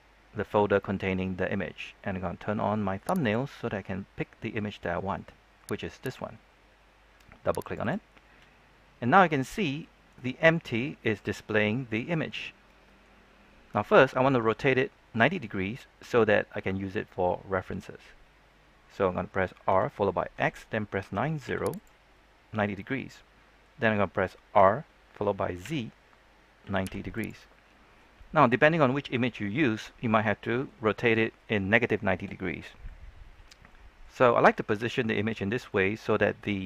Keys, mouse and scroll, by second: 8.6-9.6 scroll up 1, 9.7-13.5 shift+middle drag, 13.5-18.4 scroll down 1, 18.4-19.0 scroll up 1, 19.6-21.4 typing, 21.6 click, 22.1 middle click, 24.5 typing, 26.4-27.1 typing, 27.1 click, 27.4-36.6 middle drag.